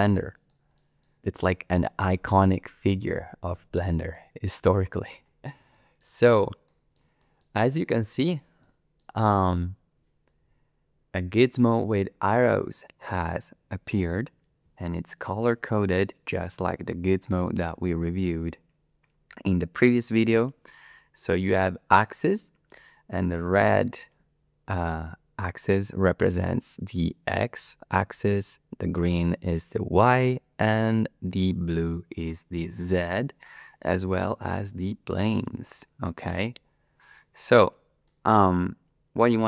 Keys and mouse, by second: 0.5 shift+middle drag, 1.0 middle click, 3.8 shift+drag, 5.7 shift+click, 5.8 shift+middle drag, 5.9 shift+click, 6.7 click, 6.7 middle click, 6.8 middle click, 7.2 shift+middle drag, 7.6-8.4 middle drag, 8.6-9.0 shift+middle drag, 37.6-38.1 middle drag.